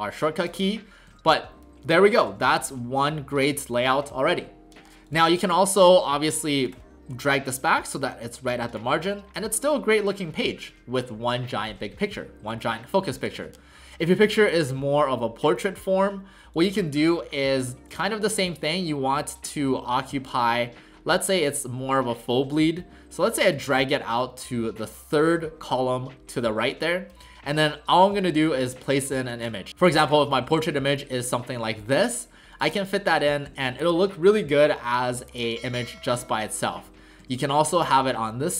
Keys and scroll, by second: 1.1 w, 2.3 w, 9.1 w, 13.4 w.